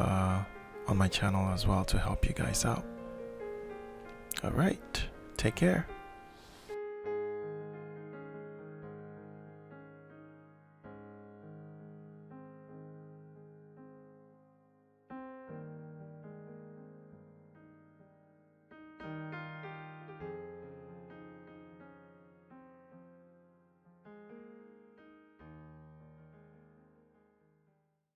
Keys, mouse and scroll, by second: 1.5 click, 2.3 click, 4.0 click, 6.0 click, 7.7 click, 10.0 click, 13.4-14.6 alt+shift+drag, 16.5 click, 17.0-19.8 drag, 20.2-22.1 drag, 24.2 middle click, 24.7-25.5 scroll up 1, 25.5-27.6 middle drag.